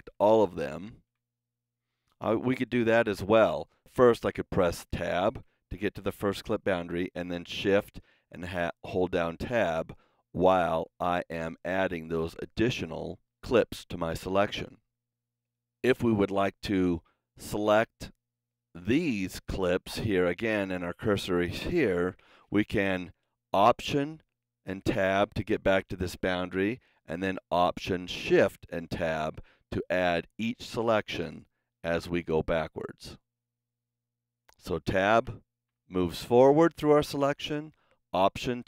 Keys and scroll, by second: 4.7 Tab, 7.8 shift+Tab, 24.2 alt+Tab, 28.1 alt+shift+Tab, 34.6 Tab, 36.0 Tab, 38.1 alt+Tab.